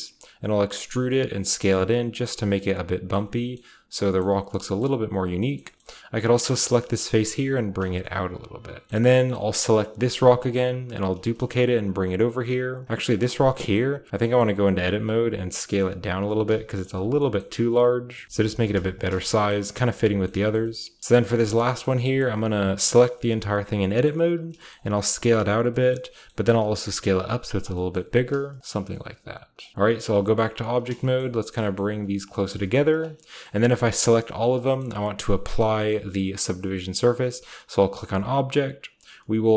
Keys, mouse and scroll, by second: 0.1-2.4 typing, 0.6 shift+click, 1.5 click, 2.0-3.9 drag, 2.3 Tab, 2.3 scroll down 1, 3.1 Tab, 3.9-5.8 scroll up 1, 4.0-4.7 typing, 5.2 click, 5.3 right click, 5.5 shift+middle click, 6.7 shift+middle click, 6.8 typing, 7.6-8.9 drag, 7.8 Tab, 10.0-12.6 shift+right drag, 10.4-12.6 shift+middle drag, 10.4-12.6 shift+scroll down 1, 11.1 shift+d, 12.6 click, 13.7-15.6 scroll up 1, 14.7-20.2 typing, 16.1 click, 16.8 click, 16.8 Tab, 17.0-18.1 scroll down 1, 17.1-17.6 drag, 18.1 middle click, 18.1 scroll down 1, 18.2 Tab, 18.2-18.6 scroll up 1, 18.6-20.5 shift+drag, 19.1 shift+Tab, 19.3-19.6 scroll down 1, 20.7-22.5 scroll up 1, 21.1-24.0 shift+middle drag, 21.8 Tab, 22.5 a, 22.7 a, 23.2-25.4 shift+scroll up 1, 24.4 s, 25.4 click, 26.3 s, 26.5 z, 27.4 click, 27.6-29.7 drag, 27.9 g, 28.2 z, 29.8 Tab, 30.1 g, 30.6-34.6 shift+drag, 31.3 shift+middle click, 31.5 g, 32.5 g, 33.1-34.6 scroll down 1, 34.6 shift+middle click, 36.8-37.2 scroll up 1, 37.2 middle click, 37.2-38.0 scroll down 1, 38.0-39.5 drag.